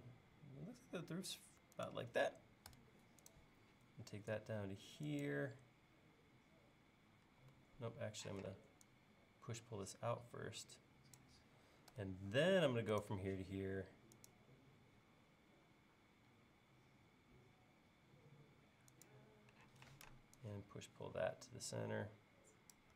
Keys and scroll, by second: 2.7 a, 7.3 l, 8.4 p, 12.0 a, 19.8 p.